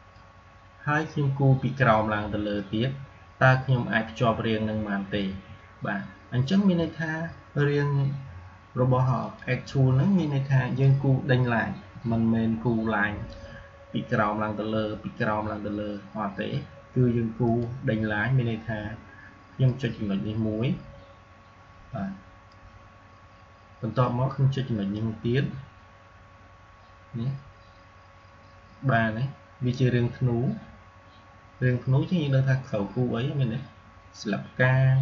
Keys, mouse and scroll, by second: 2.4-7.6 drag, 9.1-11.8 drag, 11.8 Delete, 17.3-35.0 drag.